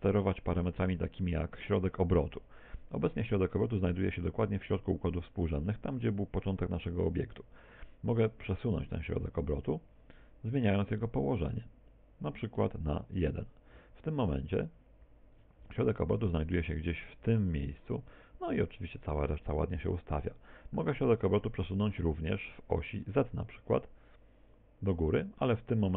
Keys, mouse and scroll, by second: 8.7 click, 21.6 middle click, 22.3 middle click, 24.5 click.